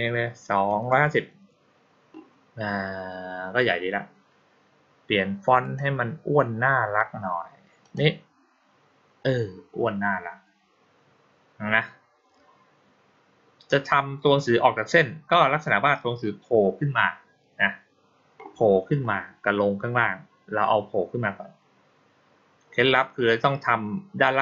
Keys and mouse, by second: 5.5 click, 7.7 click.